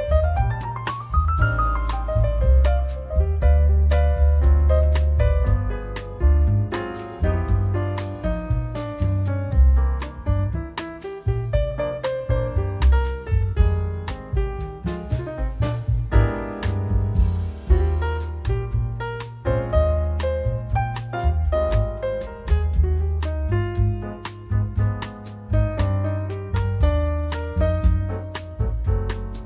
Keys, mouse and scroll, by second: 0.7 click, 2.9 click, 5.3 scroll down 1, 7.6 click, 12.0 click, 18.4 click, 22.3 click, 24.0 click, 25.4 click, 26.9 4, 28.4 click, 29.3 click.